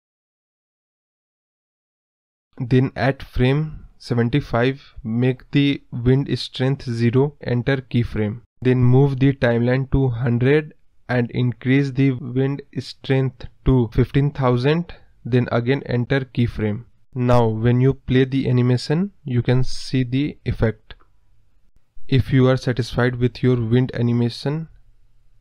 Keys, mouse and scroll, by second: 0.6 click, 0.8-2.4 typing, 2.8-4.4 drag, 4.9 scroll down 1, 5.1-7.5 middle drag, 7.5-12.7 drag, 12.7 KP_0, 13.8 click, 14.3-14.6 scroll down 3, 14.6 scroll up 2, 14.8-16.7 scroll down 1, 16.7-17.7 drag, 17.7 scroll up 2, 18.5 click, 24.6 space.